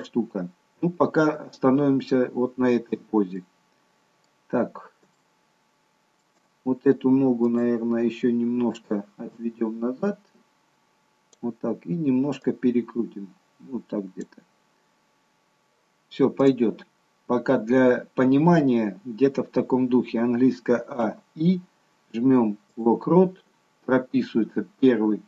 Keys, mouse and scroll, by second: 3.3-4.0 scroll up 1, 4.0 middle click, 5.1 shift+middle click, 6.7-7.4 scroll up 1, 7.4 click, 9.3 click, 12.4 click, 16.5 click, 20.8 a, 21.1 i.